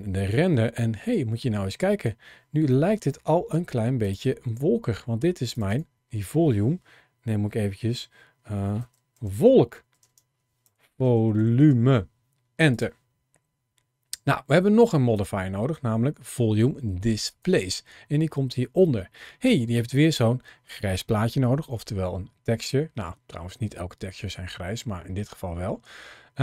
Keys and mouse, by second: 2.6 middle click, 3.9 click, 5.4 click, 5.5-12.6 drag, 15.0-17.3 drag.